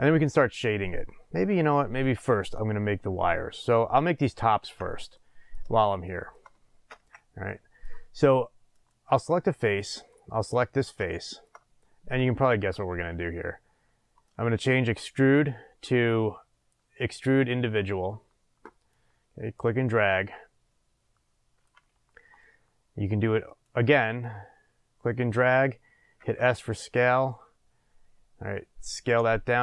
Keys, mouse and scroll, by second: 3.6 click, 4.6 Tab, 5.1-8.7 middle drag, 6.9 ctrl+s, 8.7 click, 9.9 click, 10.4 scroll up 1, 11.1-14.2 shift+middle drag, 14.2-19.1 drag, 23.4 click, 26.2 s.